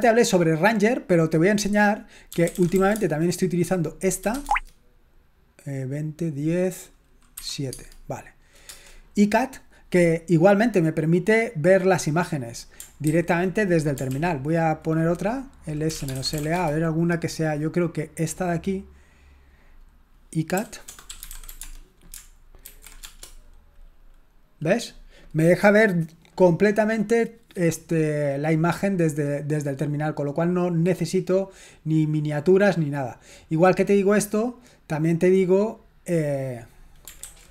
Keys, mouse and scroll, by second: 0.0-0.8 typing, 2.1-4.8 typing, 7.5 7, 7.7 Tab, 8.6 Return, 13.1 ctrl+c, 14.1 ctrl+l, 15.8-16.8 typing, 18.8 click, 20.9-21.9 typing, 22.6 ctrl+alt+v, 23.0 Return, 29.6 click, 31.9 click, 33.8-34.9 scroll down 1, 35.2 click, 37.2 ctrl+c.